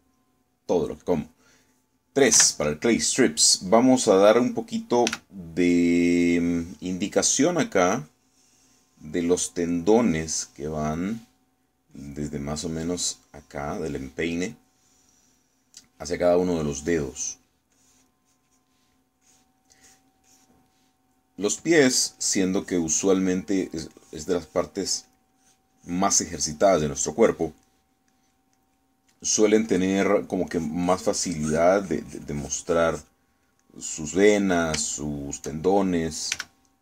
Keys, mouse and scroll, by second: 3.4 3, 6.1 f, 6.6 click, 7.1-8.3 drag, 9.1-10.3 drag, 10.9-12.2 drag, 13.0 click, 13.6-15.0 drag, 15.6-17.1 drag, 17.6 click, 18.8-19.9 drag, 20.3 click, 20.9 click, 22.5 click, 24.1 click, 24.6 click, 27.3-28.6 drag, 28.7 middle click, 29.6 middle click, 30.7 middle click, 31.5-34.3 drag, 34.7 middle click, 36.0-36.8 shift+middle drag.